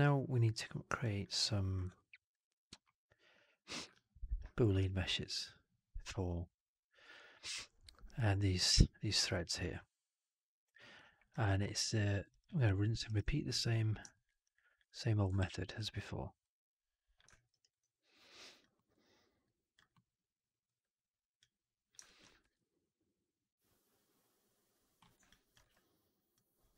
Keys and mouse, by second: 11.8-12.1 alt+middle drag, 12.2 alt+right drag, 12.3-12.8 alt+drag, 12.9 alt+right drag, 14.0 alt+drag, 14.1 alt+right drag, 14.4 alt+drag, 15.3 ctrl+d, 16.3 click, 17.2 alt+middle click, 17.4 alt+right click, 17.6 alt+right click, 17.8 alt+click, 18.6 alt+middle click, 19.3 alt+click, 19.8-20.5 alt+middle drag, 21.6 click, 21.9 alt+click, 22.3 r, 25.1 alt+click, 25.5 w, 26.3 click.